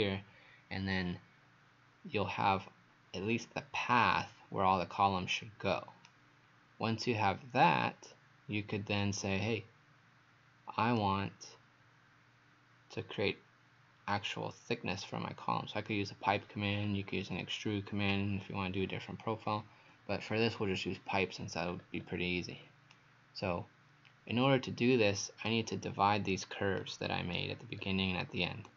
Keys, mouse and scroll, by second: 21.7-22.0 scroll up 2, 22.9 right click, 27.8-28.7 scroll down 1.